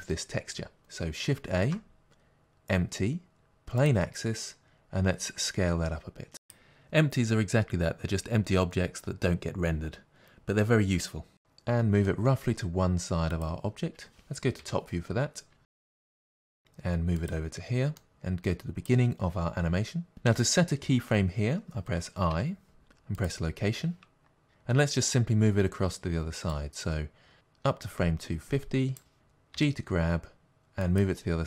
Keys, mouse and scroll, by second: 3.9 shift+a, 5.0 s, 9.4 click, 12.0 g, 14.6 KP_7, 16.3 g, 17.3 click, 18.0-19.3 shift+middle drag, 19.3-24.4 drag, 23.2 i, 24.4-26.5 shift+middle drag, 26.5-31.4 drag, 29.5 g.